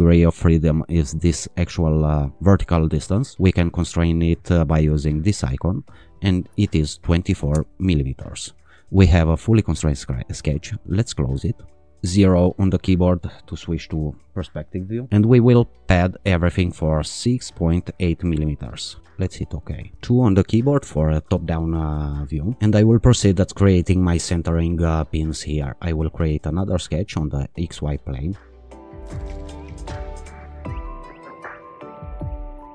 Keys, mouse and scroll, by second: 0.6 click, 5.0 click, 6.3-7.2 typing, 7.6 Return, 10.9 click, 12.1 0, 16.6 click, 19.1 click, 19.9 2, 25.9 click, 27.7 click, 28.6 click, 28.8 click, 29.3 click, 29.5 click, 29.8 click, 30.0 click, 30.2 click, 30.4 right click, 30.5 click, 30.7 click, 30.9 t, 31.1 Escape, 31.3 click, 31.4 click, 31.7 click.